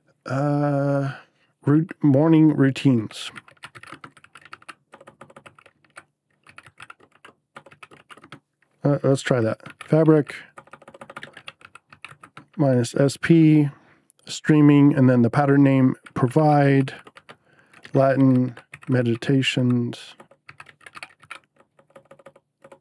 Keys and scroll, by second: 1.7-13.4 typing, 15.9-22.8 typing.